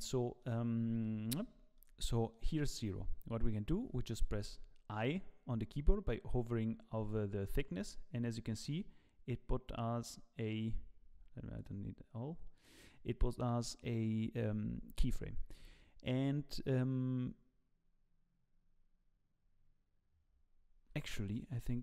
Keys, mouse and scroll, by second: 1.2 z, 1.7 middle click, 4.4 i, 11.5 click, 12.5 click.